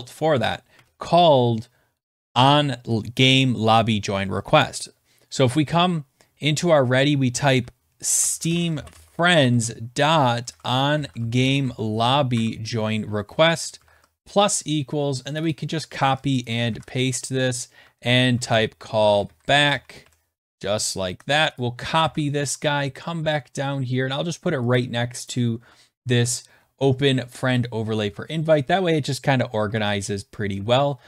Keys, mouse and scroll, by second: 0.7 Return, 0.7 middle click, 7.5-12.1 typing, 12.3 Tab, 13.3-15.8 typing, 15.3 click, 15.4 click, 16.0 ctrl+c, 16.4 click, 16.7 ctrl+v, 17.7-20.5 typing, 21.4 click, 21.6 click, 22.0 ctrl+c, 22.4-23.5 scroll, 24.6 scroll, 24.7 click, 25.3 click, 25.6 Tab, 26.7 Return, 27.3 Return, 29.6 shift+Tab.